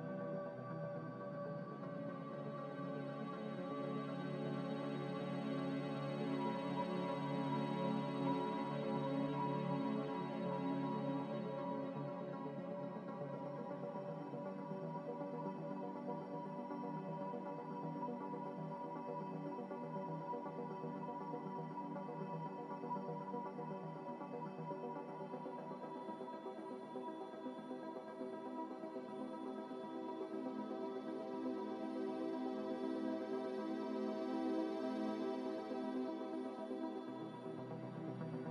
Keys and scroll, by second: 0.4 ctrl+z, 0.7 ctrl+z, 3.2 1, 8.6 ctrl+z, 8.9 ctrl+z, 9.0 ctrl+z, 10.4-11.2 typing, 12.8 ctrl+z, 13.1-13.8 typing, 18.9 ctrl+z, 19.1 ctrl+z, 19.4 ctrl+z, 19.6 ctrl+z, 20.6 ctrl+z, 30.0 a, 31.5 5.